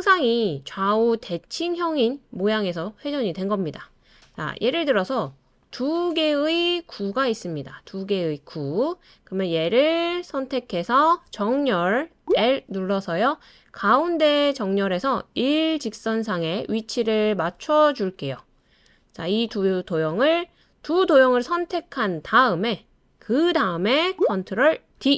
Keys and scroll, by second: 12.2 l, 25.0 super+d.